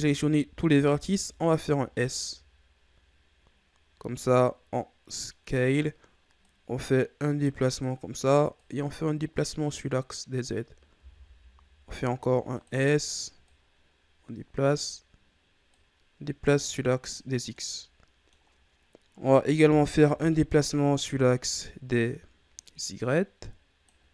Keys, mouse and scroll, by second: 0.8 s, 6.4-10.9 drag, 10.9 s, 13.4-17.3 drag, 17.3 scroll down 2, 17.5 middle click, 18.4-19.4 scroll up 2, 20.1 KP_3, 21.1-22.4 shift+scroll up 4, 22.5-24.1 drag.